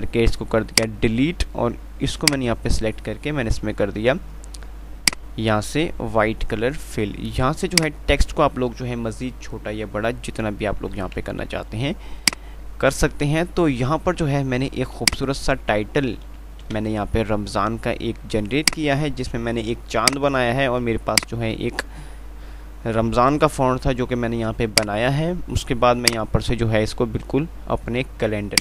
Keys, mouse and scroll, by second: 1.0-8.0 shift+drag, 8.0-12.6 shift+drag, 15.3-17.2 drag, 17.2 ctrl+z, 18.9 click, 20.4 right click, 21.4-28.6 alt+drag.